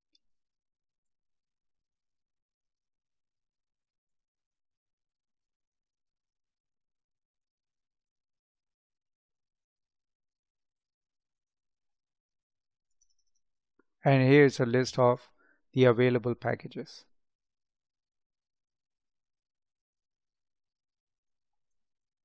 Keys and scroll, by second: 5.2 space, 17.9 space, 21.2 space.